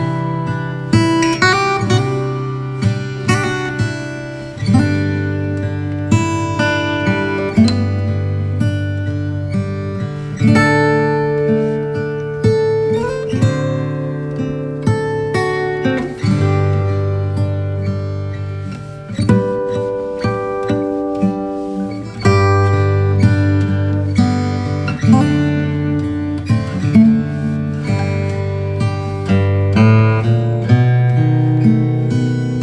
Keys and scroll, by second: 1.0 v, 1.3 space, 5.0 shift+super+g, 7.1 shift+super+g, 15.1 b, 16.4 x, 18.1 3, 18.6 ], 23.1 |, 23.6 ], 25.1 [, 28.8 v, 29.6 space, 31.6 b, 32.4 [, 32.5 [.